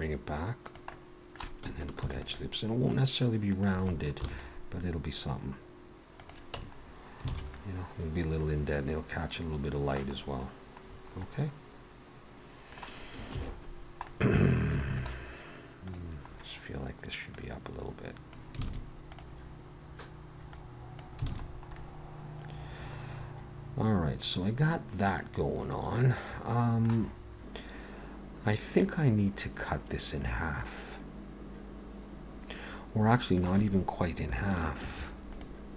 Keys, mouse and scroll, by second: 0.9 middle click, 2.0 ctrl+r, 4.2 ctrl+r, 6.6 Tab, 6.8-7.2 scroll down 3, 7.3 alt+a, 7.5 middle click, 10.1 scroll up 3, 10.9-11.4 scroll down 4, 11.2 middle click, 13.4 ctrl+s, 13.7-15.9 scroll down 2, 14.1 middle click, 15.9 click, 16.2-17.1 scroll up 3, 17.3 click, 18.6 alt+a, 19.1 click, 20.6 click, 21.3 alt+a, 21.4-21.9 scroll down 4, 21.8 middle click, 26.9 ctrl+z, 26.9 middle click, 26.9 scroll down 1, 34.8 ctrl+r.